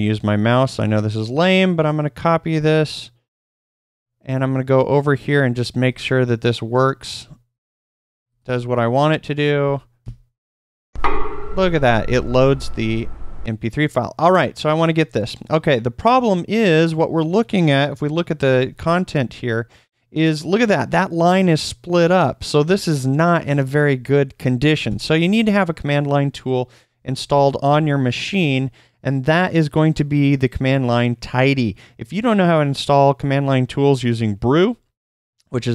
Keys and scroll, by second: 8.5 super+v, 9.6 super+Left, 18.0-19.8 typing, 27.1 space, 27.2 Return.